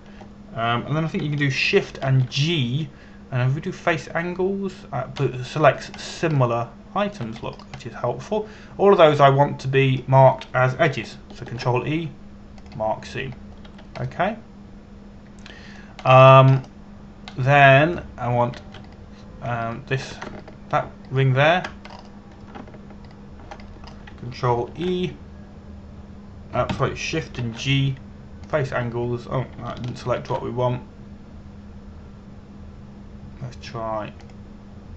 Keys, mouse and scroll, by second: 0.5 alt+right click, 3.7 shift+g, 5.5 click, 6.9-7.7 scroll down 1, 8.1 shift+middle click, 9.1 scroll up 1, 9.4 middle click, 13.1 ctrl+e, 14.2 click, 15.3 a, 15.7 middle click, 17.7 scroll up 1, 19.0 middle click, 20.5 right click, 21.3 shift+right click, 22.0 alt+right click, 22.7 alt+right click, 23.5 scroll up 1, 24.7 alt+right click, 25.3 scroll down 1, 26.3 ctrl+e, 28.3 Escape, 29.1 shift+g, 30.1 click, 30.9-31.3 scroll down 1, 31.9 shift+g.